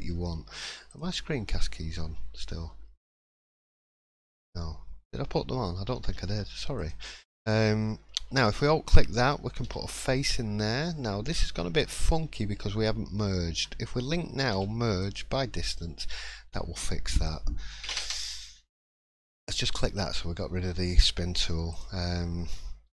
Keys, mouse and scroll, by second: 6.8 alt+click, 9.6 f, 11.8 right click, 13.6 right click, 13.6 l, 14.5 m, 17.1 click, 19.5 click, 22.8 3.